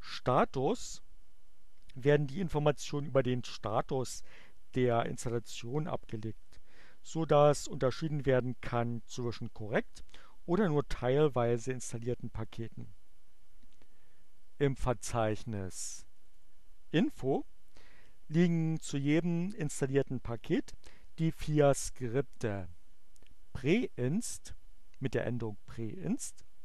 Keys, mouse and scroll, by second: 14.9 click, 16.0 click, 24.1 click.